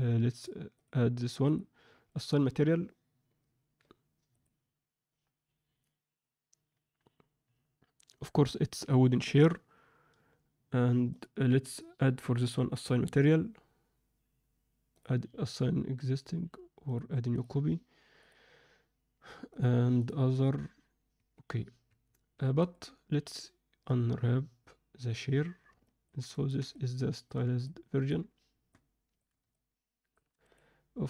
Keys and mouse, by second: 0.7 click, 5.6 click, 11.0 click, 12.6-17.4 drag, 18.1-19.6 drag, 20.0-24.5 drag, 24.5 Escape, 25.8 ctrl+alt+middle drag, 26.4 ctrl+alt+middle drag, 26.8-27.4 alt+middle drag, 27.7-28.3 ctrl+alt+middle drag, 28.9-29.4 alt+shift+middle drag, 29.7-30.3 alt+shift+middle drag, 30.5 click.